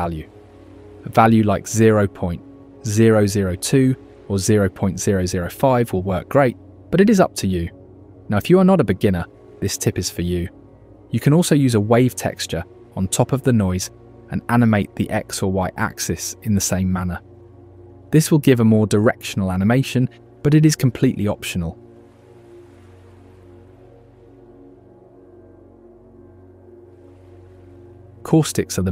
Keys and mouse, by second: 0.0 KP_Enter, 3.0 shift+middle click, 3.5 shift+middle drag, 4.8 shift+middle drag, 5.8-7.9 middle drag, 6.9 KP_0, 9.9-10.5 shift+middle drag, 12.0-14.3 middle drag, 15.6 shift+middle click, 18.1 click, 19.9 click, 22.3 click, 23.9 click, 24.1 click, 24.8 click, 25.7 click, 26.7 click.